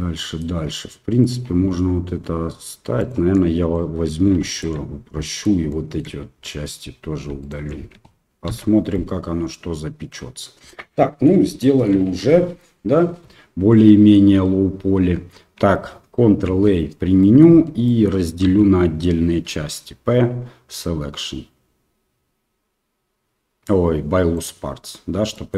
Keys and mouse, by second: 3.0 alt+right click, 3.3 middle click, 4.5 alt+shift+right click, 5.1 shift+middle click, 5.6 shift+middle click, 6.4 middle click, 7.4 alt+shift+click, 8.4 ctrl+x, 8.9-10.1 middle drag, 10.6 middle click, 11.6 shift+middle click, 13.3 Tab, 13.7 middle click, 14.2 Tab, 15.0 Tab, 16.6 ctrl+a, 17.2 middle click, 17.5 Tab, 17.8 middle click, 18.4 a, 19.4 p, 25.3 middle click.